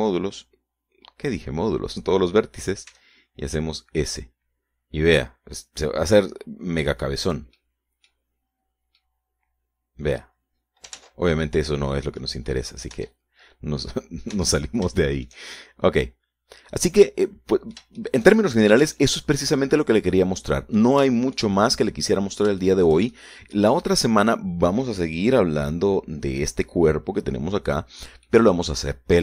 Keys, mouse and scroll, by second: 4.4 s, 8.7 click, 9.0 middle click, 9.6 scroll up 1, 9.8-10.4 scroll down 1, 10.4-11.8 middle drag, 12.4 ctrl+z, 12.8-13.8 ctrl+middle drag, 14.4 Tab, 15.3 scroll down 1, 15.8 Tab, 16.4-22.4 shift+middle drag, 22.6-23.6 shift+middle drag, 23.6-24.1 shift+scroll up 1, 24.1 shift+middle click, 24.9 middle click, 25.3-25.6 scroll down 1, 25.6-26.7 scroll up 1.